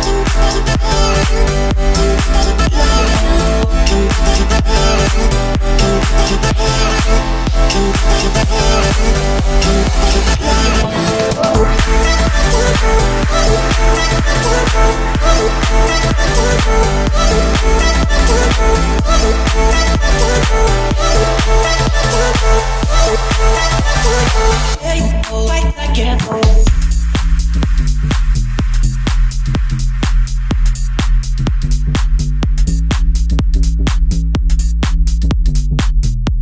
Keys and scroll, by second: 0.4 Delete, 1.3 Delete, 2.2 Delete, 3.0 Delete, 6.0 d, 6.2 w, 6.6 a, 6.9 w, 8.2 w, 8.5 a, 8.8 w, 10.5-11.8 typing, 12.1 Escape, 12.6 ctrl+s, 16.7 Escape, 19.6 Escape.